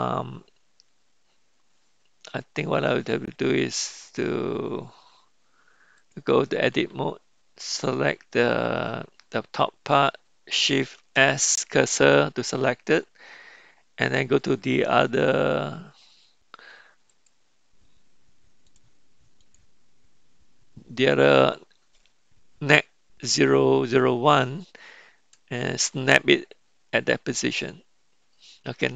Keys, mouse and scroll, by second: 6.1-6.8 drag, 7.7 click, 11.0 shift+s, 14.0 click, 17.0 click, 18.6 click, 25.9 shift+s.